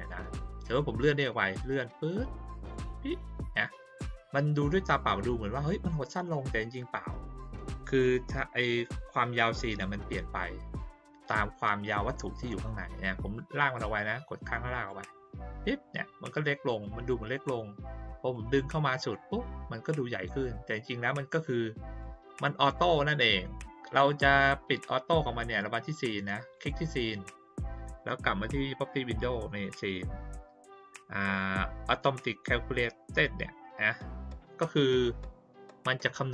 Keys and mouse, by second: 1.3-2.7 drag, 13.3-14.8 drag, 16.8-17.1 drag, 18.3 click, 22.0 click, 25.6 click, 26.5 click.